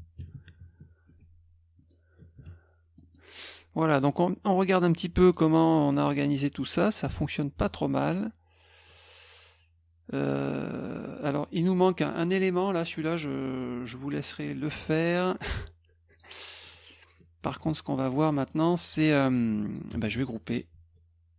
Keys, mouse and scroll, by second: 1.1 F1, 1.8 drag, 3.0 middle drag, 4.0 click, 5.3 click, 6.1 click, 7.0 click, 7.6 click, 8.9 click, 11.3 click, 12.1 middle click, 12.1 scroll up 2, 12.2 middle click, 16.1 click, 16.7 click, 18.3 middle click, 19.7 click.